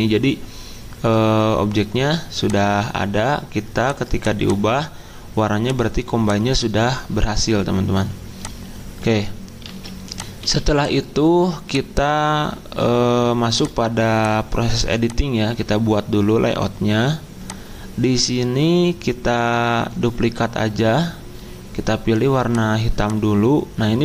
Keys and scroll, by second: 9.6 ctrl+s, 10.4 z, 16.1 z.